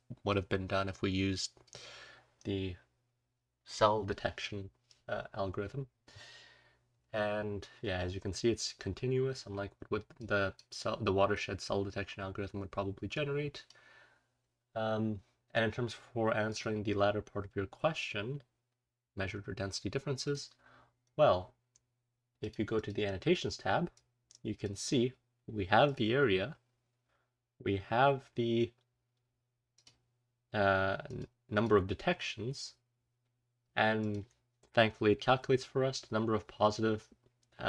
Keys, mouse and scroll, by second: 0.8-1.6 drag, 6.8-7.7 scroll up 2, 7.7-9.3 scroll up 1, 9.3-10.1 scroll down 2, 10.1 click, 10.1-11.3 scroll down 1, 11.3-12.5 scroll up 2, 12.5-13.1 scroll up 1, 13.1-13.6 drag, 13.1-13.6 scroll up 1, 18.9-19.2 scroll down 1, 20.5 drag, 21.2-22.1 scroll down 2, 22.3 click, 22.7 click, 25.8 click, 29.7 click, 31.0 click, 31.5 click, 33.9 click.